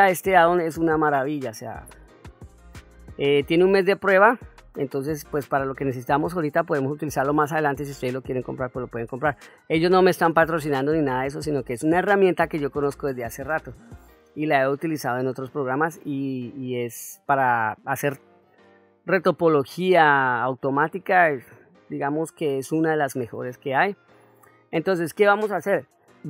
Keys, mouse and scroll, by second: 1.1-1.4 middle drag, 2.3-3.1 ctrl+middle drag, 3.6 middle click, 4.8 middle click, 7.5 middle click, 9.3-10.0 ctrl+middle drag, 10.4-10.9 ctrl+middle drag, 11.3 middle click, 11.9-12.4 ctrl+middle drag, 12.7-13.4 middle drag, 14.2-15.0 ctrl+middle drag, 15.3 ctrl+middle click, 16.0 click, 17.5 click, 20.1-20.7 ctrl+middle drag, 23.0-23.4 shift+middle drag, 23.8-24.6 ctrl+middle drag.